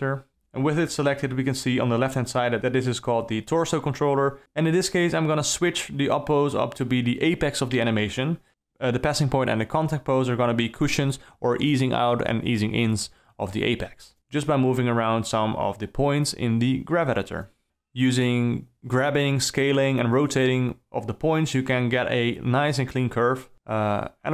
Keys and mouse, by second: 0.4 shift+h, 4.0 ctrl+z, 8.7 Down, 8.8 Up, 9.4 alt+middle click, 9.8 ctrl+middle click, 11.1-11.4 drag, 11.4 r, 12.1 click, 12.3 g, 13.0 click, 13.1 g, 14.7 d, 14.9 middle click, 15.5 KP_0, 15.8 shift+Left, 15.9 d, 16.0 space, 17.5 space, 17.8 alt+a, 18.0 g, 18.5 r, 18.8 drag, 20.3 s, 21.2 d, 21.6 click, 22.3 ctrl+c, 22.8-23.4 drag, 23.7 ctrl+shift+v.